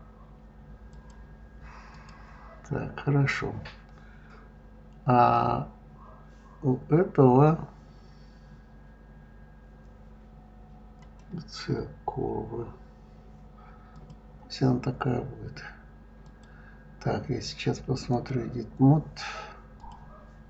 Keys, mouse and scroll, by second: 0.9-2.0 drag, 11.0 click, 13.9 click, 16.2-19.2 drag, 19.8 click.